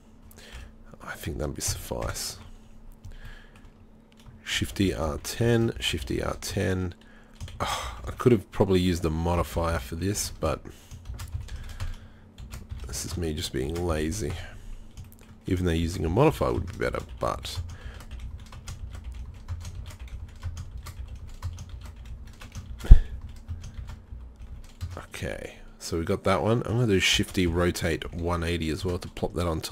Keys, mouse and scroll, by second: 0.6 KP_1, 1.7 ctrl+KP_3, 2.0 ctrl+KP_1, 4.6 shift+d, 5.8 shift+d, 7.6 shift+d, 11.1 shift+d, 12.4 shift+d, 13.7 shift+d, 15.9 shift+d, 16.9-22.8 typing, 23.8 shift+d, 27.2 shift+d.